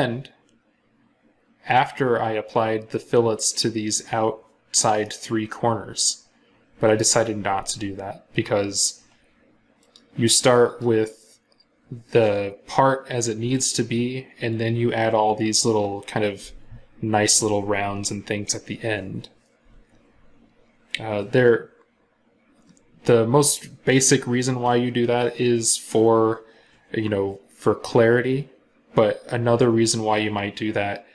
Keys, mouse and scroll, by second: 9.7 right click.